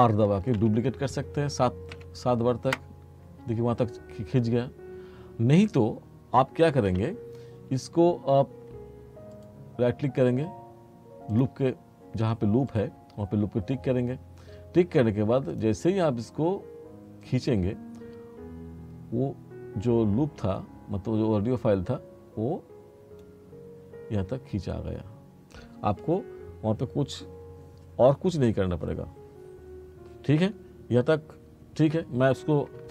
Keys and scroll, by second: 0.5 r, 2.0 7, 2.7 Return, 6.9 ctrl+z.